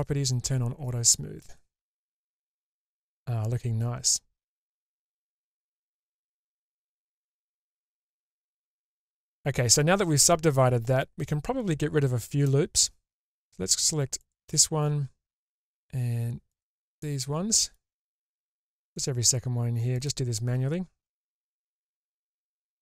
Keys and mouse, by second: 1.1 middle click, 1.9 shift+space, 2.6-9.0 middle drag, 12.7 middle click, 17.0 middle click.